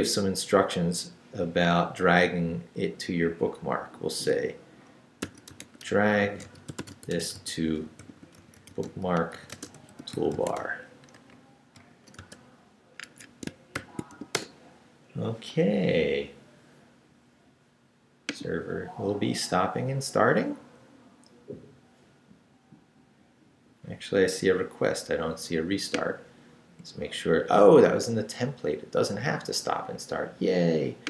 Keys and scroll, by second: 0.5 Left, 1.2 Left, 5.0-12.2 typing, 13.0 Escape, 13.7 shift+;, 14.1 shift+w, 14.3 Return.